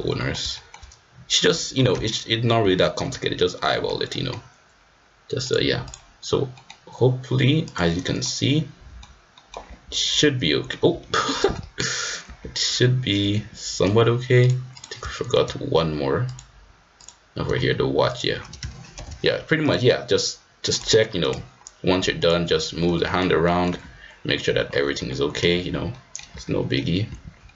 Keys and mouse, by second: 0.1 middle click, 0.5 shift+middle click, 2.8 shift+middle click, 3.5 middle click, 4.1 middle click, 5.4-5.9 drag, 6.5 middle click, 7.6-8.8 drag, 8.8 middle click, 9.3 middle click, 9.4 click, 9.7 g, 11.2 click, 11.4 middle click, 12.2 g, 14.4 click, 15.1 shift+middle click, 16.9 click, 18.9 ctrl+p, 20.7-21.4 drag, 22.1 click, 22.4-23.3 right drag, 23.4 middle click, 23.7 g, 24.9 g, 25.9 click, 26.0 middle click, 26.3 g, 27.4 middle click.